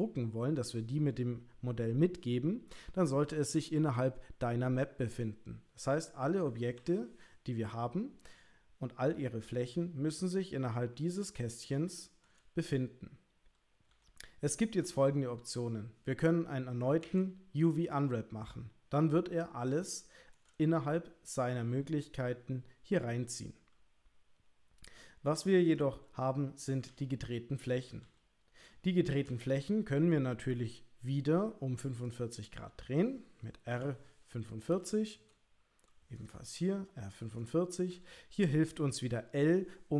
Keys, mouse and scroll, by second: 6.8 a, 17.0 u, 20.2 shift+click, 26.9 l, 28.0 l, 33.7 r, 37.9 l.